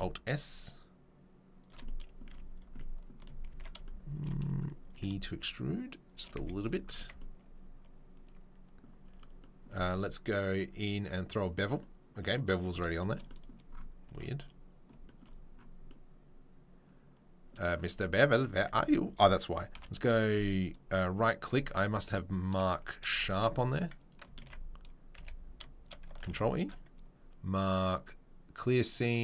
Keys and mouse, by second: 1.6-3.2 shift+middle drag, 2.2 z, 3.5 ctrl+z, 3.6 middle click, 4.2 middle click, 4.9 e, 6.2-10.4 middle drag, 6.3 z, 7.0 Tab, 9.0 Tab, 10.4 click, 10.5-20.9 middle drag, 14.0 Tab, 17.8 Tab, 18.4 Tab, 18.7 a, 19.7 m, 20.9-24.2 right drag, 23.2 shift+e, 24.2-29.2 ctrl+middle drag, 24.4 ctrl+z, 25.1 a, 26.2 ctrl+e.